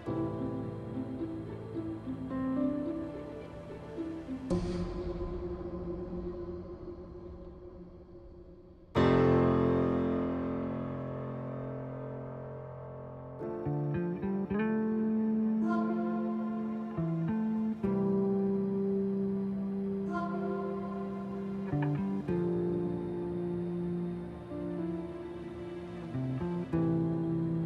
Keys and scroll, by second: 10.6 s, 13.1 s, 15.7 shift+s, 22.2-26.6 typing.